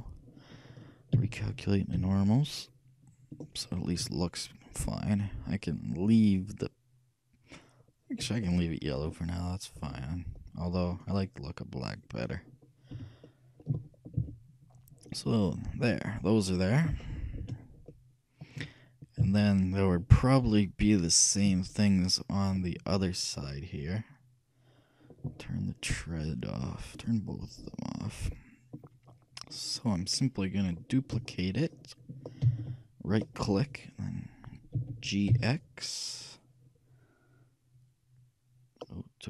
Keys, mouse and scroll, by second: 1.2 t, 2.1 n, 3.4-5.2 drag, 4.1 a, 6.1-7.9 drag, 8.2 middle click, 8.5-10.4 middle drag, 11.0-12.7 drag, 12.7 middle click, 13.0 a, 14.4 KP_3, 15.1-16.6 middle drag, 19.3 shift+KP_3, 21.6 KP_1, 23.5-25.2 middle drag, 26.3 middle click, 27.0-29.0 drag, 27.9 middle click, 28.6 right click, 29.0-32.0 middle drag, 32.5 shift+d, 34.8 g.